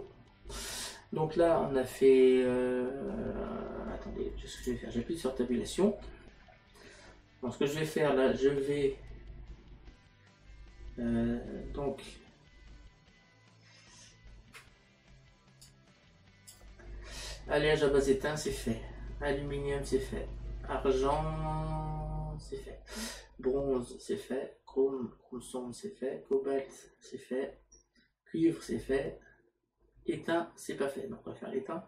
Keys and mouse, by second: 4.6 click.